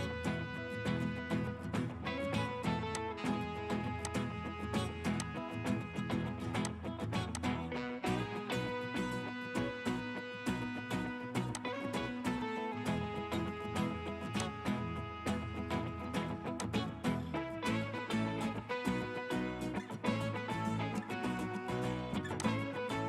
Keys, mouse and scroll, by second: 0.8-2.8 scroll up 1, 9.3 scroll, 9.5 typing, 10.7 Return, 13.4 Escape, 17.3-18.6 scroll down 1, 22.9-23.0 scroll up 1.